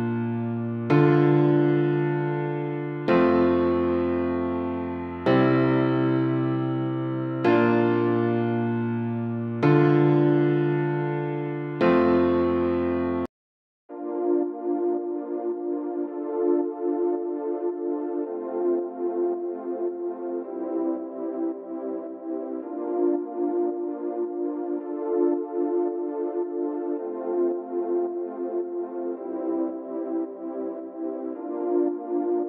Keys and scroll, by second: 12.9-13.4 typing.